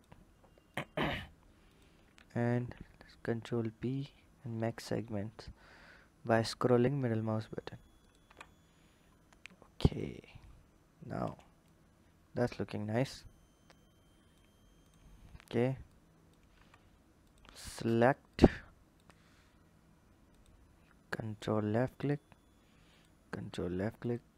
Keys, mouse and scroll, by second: 0.5 shift+click, 1.5 shift+click, 2.4 ctrl+b, 8.0 Tab, 8.5-8.9 scroll down 3, 9.3-9.7 scroll down 2, 9.7 drag, 10.3-11.4 scroll down 2, 11.4 click, 14.6 click, 15.6 click, 16.4 Tab, 17.0 click, 18.1 click, 20.1 ctrl+click, 22.7 ctrl+click, 23.8 ctrl+click.